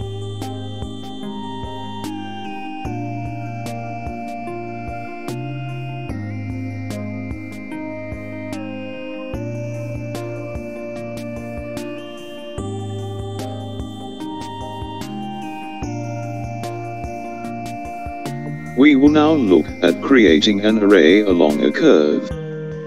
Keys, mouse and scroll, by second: 5.6 click, 22.0 click.